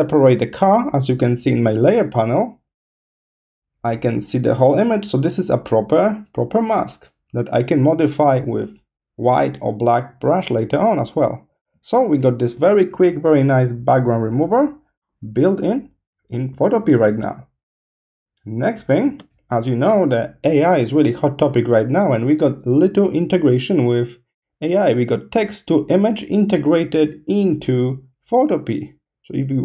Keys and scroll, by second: 16.5 space, 18.0 space.